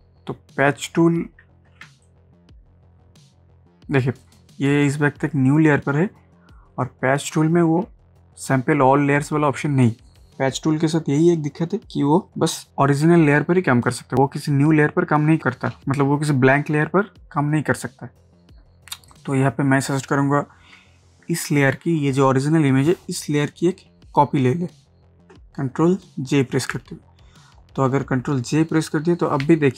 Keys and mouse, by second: 1.8 ctrl+space, 2.0 ctrl+click, 2.3 space, 3.0 ctrl+space, 19.1 click, 25.3 ctrl+Num_Lock, 25.3 click, 26.5 ctrl+j.